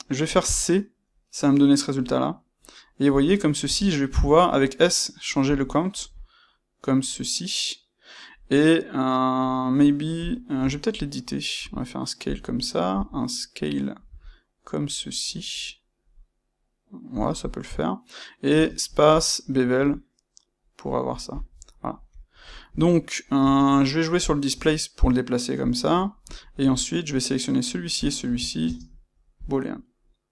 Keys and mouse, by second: 5.9-10.2 middle drag, 10.2 click, 10.5 Tab, 10.9-12.2 middle drag, 11.5 s, 12.2 click, 12.5-17.2 middle drag, 14.0 s, 17.2 click, 18.5 space, 21.3 click, 21.5 middle click, 23.3 space, 26.3 click, 27.9 shift+click, 28.5 space.